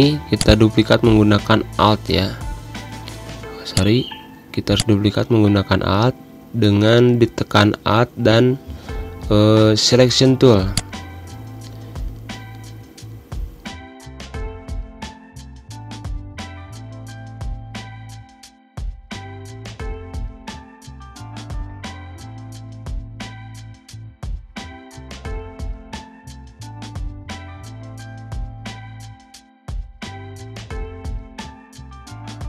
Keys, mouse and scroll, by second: 0.4 click, 3.9-8.1 drag, 8.1 \, 9.3 v, 10.9 click, 12.1 Escape.